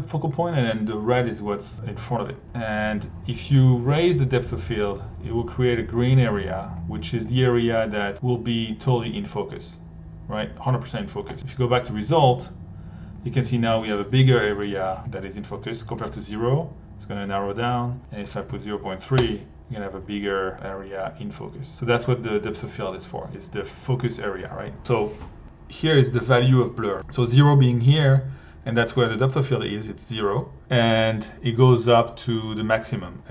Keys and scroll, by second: 15.9 0, 16.0 Home, 18.0-18.9 typing, 19.1 Home, 22.7 1.